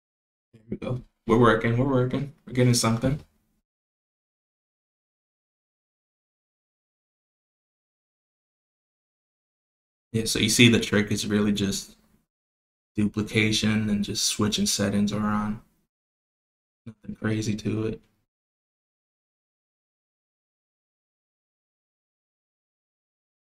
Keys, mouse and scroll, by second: 3.1 click, 5.6 drag, 6.6-7.5 drag, 9.2 click, 10.3 click, 11.1-13.0 drag, 13.4 click, 14.5 click, 15.0 click, 17.5-18.9 drag, 20.5 click, 21.2 click, 22.8 click.